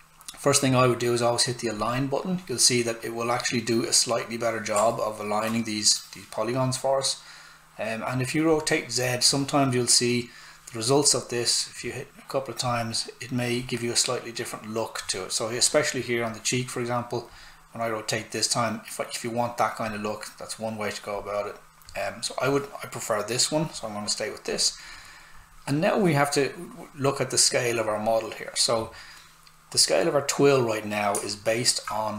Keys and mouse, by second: 4.9 alt+right click, 8.4 click, 11.8 click, 17.3 click, 29.7 click.